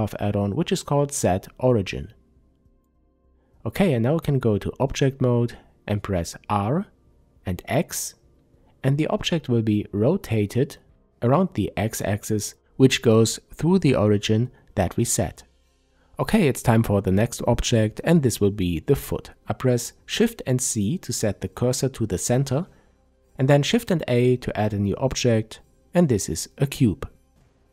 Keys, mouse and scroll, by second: 0.3 click, 1.7 Tab, 3.7-5.6 scroll down 1, 5.6 r, 13.2 Escape, 13.5-13.9 scroll down 1, 14.3-27.7 middle drag, 17.4 shift+c, 18.5-18.8 scroll up 1, 22.4 shift+a.